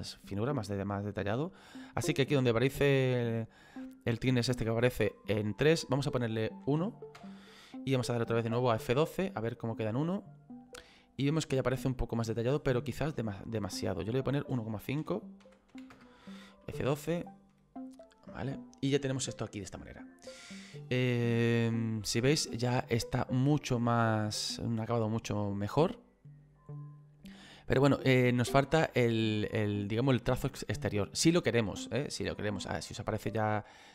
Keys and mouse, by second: 5.6 click, 6.6 KP_1, 8.2 F12, 14.0 click, 15.0 KP_1, 15.4 KP_Decimal, 15.7 KP_5, 15.9 Return, 15.9 KP_Enter, 16.7 F12.